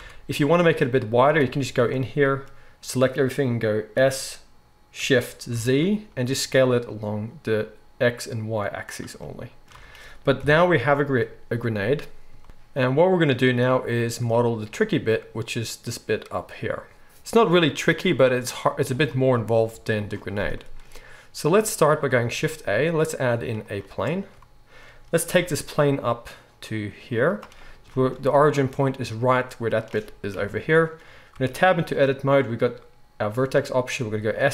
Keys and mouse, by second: 0.0 Tab, 1.4 a, 3.9 s, 9.3-25.3 middle drag, 9.7 Tab, 10.3 KP_1, 12.4 Tab, 12.4 alt+a, 12.4 shift+e, 12.4 z, 21.7 right click, 22.3 shift+a, 25.3-28.4 right drag, 25.4 g, 28.4-34.5 middle drag, 30.3 KP_1, 31.3 Tab, 34.3 s.